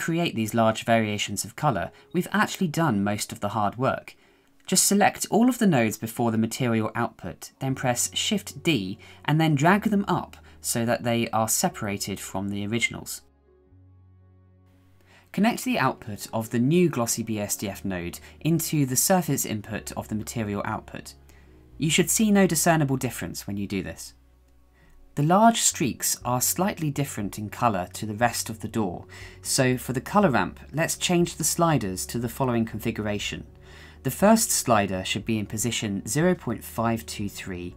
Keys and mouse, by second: 1.7 shift+middle click, 3.8-7.2 drag, 9.4 shift+d, 15.5-16.8 drag, 26.4 shift+middle click, 29.5-30.8 shift+middle drag, 31.1 click, 34.0 click.